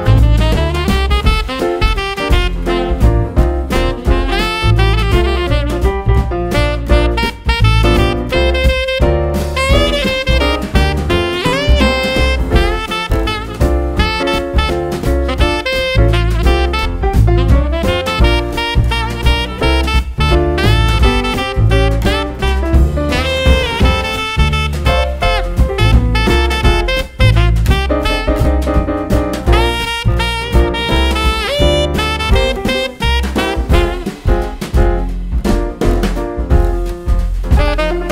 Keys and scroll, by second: 14.9 super+c, 15.2 super+v, 21.9 super+d.